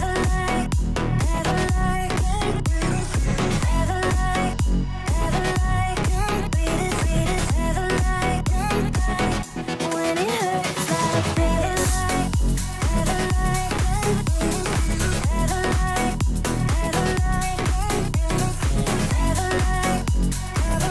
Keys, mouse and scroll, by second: 0.4 click, 4.7 click, 7.2 shift+Left, 12.8 click, 14.9 shift+Right, 16.8 click, 17.8 Right, 19.0 ctrl+z.